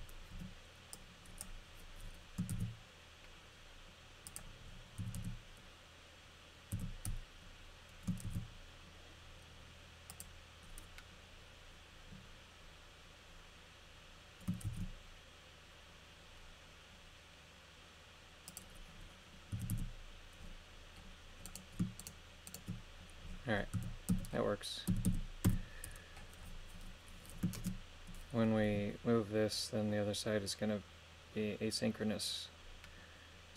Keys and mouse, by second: 0.3 b, 2.5 shift+d, 4.3 click, 5.0 a, 5.2 a, 6.7 a, 8.3 shift+d, 10.1 click, 14.7 shift+d, 19.5 a, 19.7 a, 22.0 shift+right click, 22.5 shift+right click, 23.7-25.5 typing, 27.6 shift+space, 28.6 g.